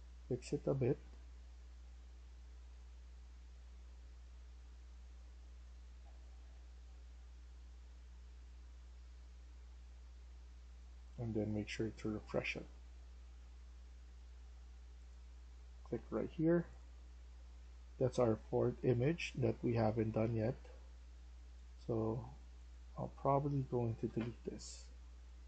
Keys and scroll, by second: 0.0-0.4 typing, 17.0-20.8 typing, 22.8-25.4 typing.